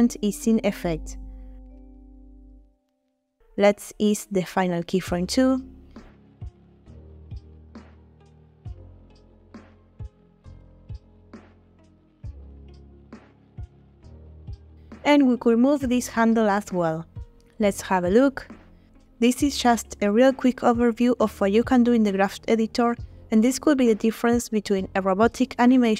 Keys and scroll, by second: 10.5 space, 17.8 space.